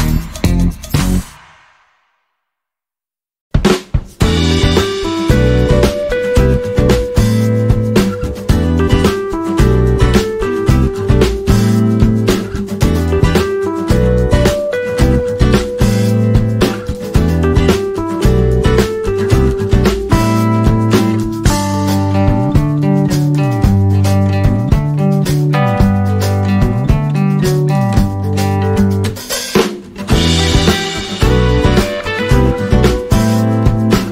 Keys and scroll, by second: 18.4 shift+Left, 19.0 alt+a, 27.0 Tab.